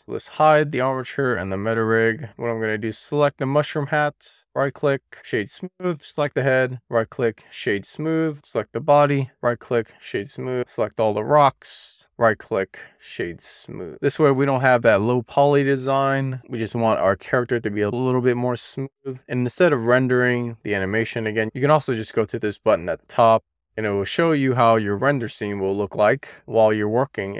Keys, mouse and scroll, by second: 2.1 click, 4.0-4.4 scroll down 2, 4.4-6.2 right drag, 6.2 click, 7.0-8.4 right drag, 8.4 click, 8.8-10.6 right drag, 10.6 click, 10.8-11.9 right drag, 11.9 click, 12.0 right click, 12.7 click, 12.9-21.5 right drag, 23.0 click, 26.4-27.1 scroll down 5, 27.3 scroll down 3.